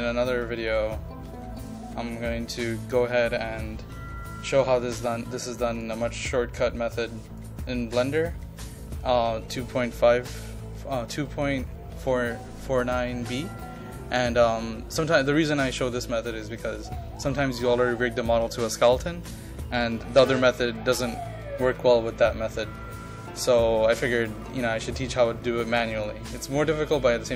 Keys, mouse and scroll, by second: 0.1-2.6 drag, 5.5 ctrl+click, 6.2-17.3 drag.